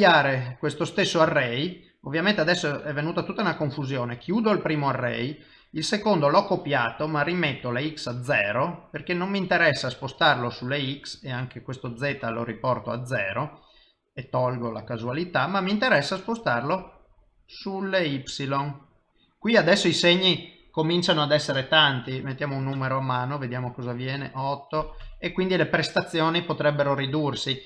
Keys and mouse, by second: 1.8 ctrl+middle click, 4.2 click, 7.3 click, 11.5 click, 13.9 click, 24.2 click.